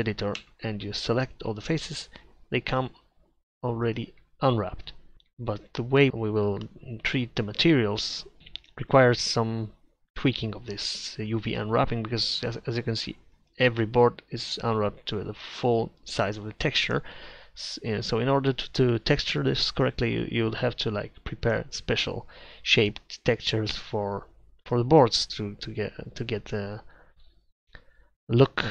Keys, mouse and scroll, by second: 0.5 Tab, 0.9 a, 4.6-6.1 middle drag, 6.8 middle click, 9.9 middle click, 13.5-16.9 drag.